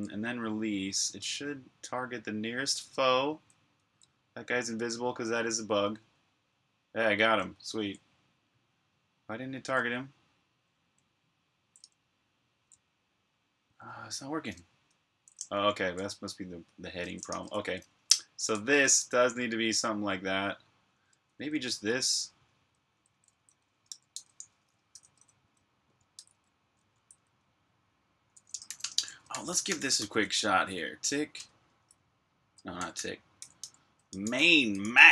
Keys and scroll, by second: 1.6-4.0 typing, 5.6-7.1 typing, 8.8-12.2 typing, 13.3-15.0 typing, 17.2 super+q, 18.1-19.3 typing, 21.6-26.6 typing, 28.2-31.2 typing, 31.2 Return, 32.4-35.1 typing.